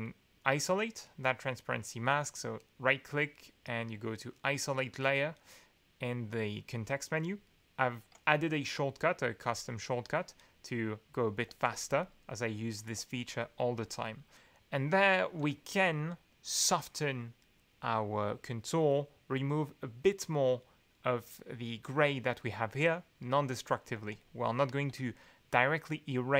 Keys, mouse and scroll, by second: 2.6-9.8 right drag, 9.4 click, 11.4 alt+2, 12.9 alt+2, 23.9 alt+2.